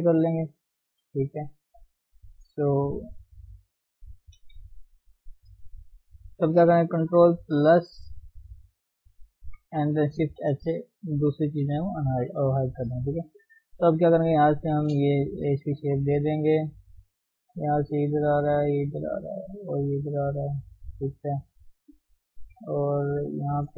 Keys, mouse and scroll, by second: 0.4 shift+z, 1.5 scroll up 1, 3.1 g, 4.4 KP_3, 5.4 shift+z, 5.8 shift+z, 6.1-7.6 middle drag, 7.6 ctrl+KP_Add, 10.2 shift+h, 11.2 KP_3, 11.6-12.0 scroll up 2, 12.0 shift+z, 12.9 click, 13.8 g, 15.7 g, 16.6 click, 16.7 g, 17.9 click, 18.0 g, 19.6 click, 19.7 g, 21.9 click, 22.0 g, 23.3 click, 23.4 g.